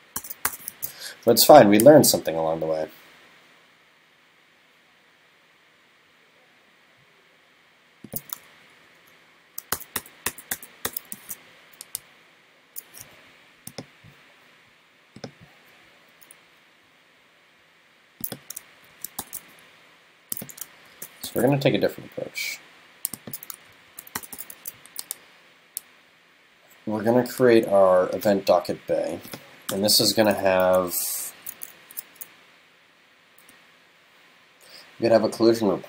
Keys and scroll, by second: 0.7 super+s, 8.6 shift+super+Left, 11.2 super+s, 18.8 shift+super+Left, 20.8 shift+super+Left, 23.7 shift+super+Left, 24.6 super+s.